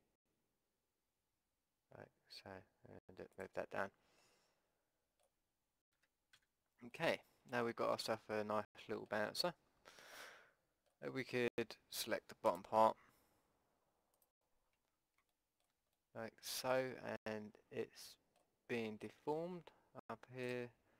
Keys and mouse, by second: 4.2-5.9 middle drag, 5.9 KP_5, 6.3 z, 12.5-15.4 drag, 15.4 middle click, 15.5 click, 16.0 middle click, 17.0 middle click, 17.2 middle click, 20.4-20.9 drag.